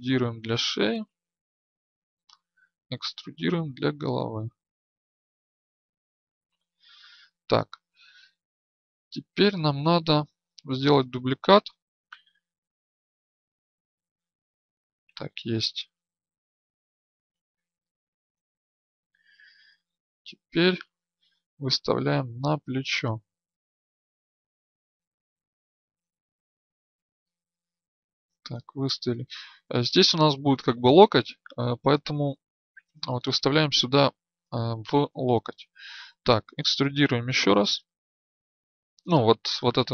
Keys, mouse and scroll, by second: 0.7-2.6 drag, 3.4 e, 4.6-6.6 drag, 9.0 right click, 11.7 ctrl+d, 12.2 shift+d, 16.4-23.9 drag, 23.9 right click, 24.8-29.4 drag.